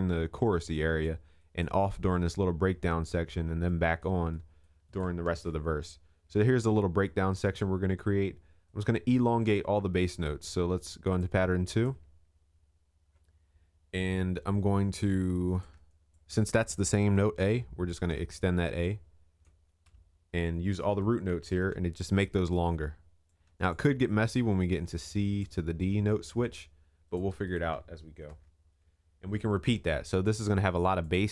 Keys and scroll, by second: 5.3 ctrl+s, 21.6 ctrl+a, 28.2 ctrl+s.